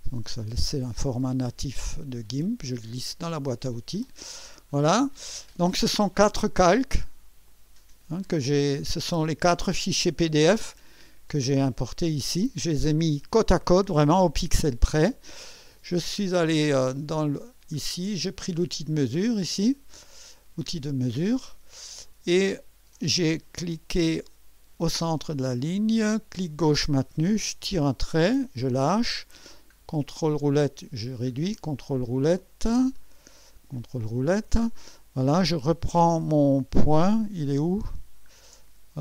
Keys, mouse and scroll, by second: 0.9-3.6 drag, 7.5 click, 8.1 click, 8.8 click, 9.4 click, 10.1 click, 10.7 click, 11.6 click, 12.1 click, 15.4-16.0 ctrl+scroll up 2, 16.3 ctrl+middle click, 17.4-17.8 ctrl+scroll up 2, 18.2 ctrl+middle click, 21.4 middle click, 22.4-22.8 ctrl+scroll up 2, 26.5-28.5 drag, 29.1-29.8 ctrl+scroll down 4, 30.6 ctrl+middle click, 31.5-32.2 ctrl+scroll down 4, 33.6 ctrl+scroll down 2, 37.7-38.4 ctrl+scroll up 4.